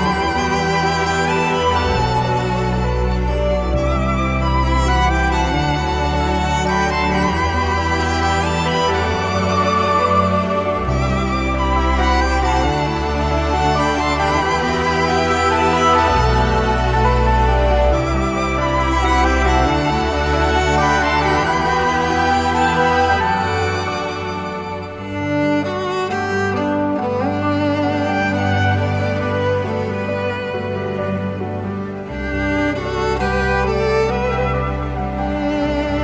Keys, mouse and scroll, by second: 27.5 space, 28.5 Return, 28.5 0, 30.0 Return.